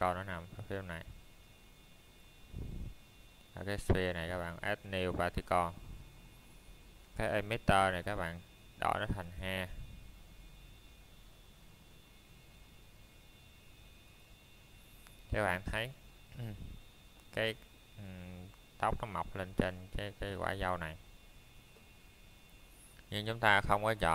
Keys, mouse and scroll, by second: 0.3 middle click, 1.3 scroll down 1, 1.9 middle click, 4.9 scroll down 1, 5.3 middle click, 5.6 scroll up 1, 6.2 middle click, 7.0 scroll up 1, 7.3 middle click, 7.8 scroll down 1, 8.2 middle click, 15.2 middle click, 18.7 click, 21.8 click, 22.7 middle click.